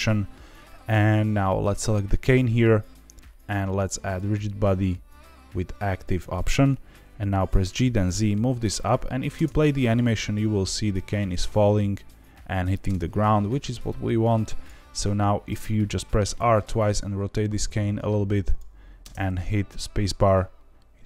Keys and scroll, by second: 7.5 g, 7.7 z, 9.3 space, 12.8 space, 16.3 r, 16.5 r, 18.9 space.